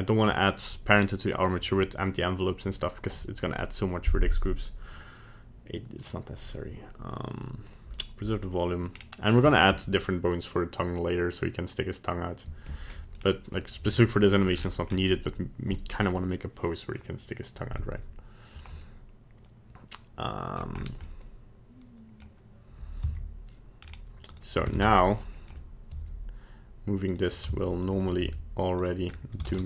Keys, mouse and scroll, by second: 4.9 click, 6.4 click, 7.9 click, 8.9-9.6 scroll down 2, 9.4 middle click, 13.1 middle click, 13.2-13.5 scroll down 2, 14.5 scroll down 6, 14.8-15.1 scroll up 3, 18.7 middle click, 20.1 middle click, 20.7 scroll up 3, 21.0 middle click, 23.0 z, 23.8-24.3 scroll down 3, 24.3 right click, 24.7 ctrl+Tab, 25.0 right click, 25.2 middle click, 25.9 r, 27.4 z, 28.2 r, 29.0-29.4 scroll up 2, 29.5 ctrl+Tab.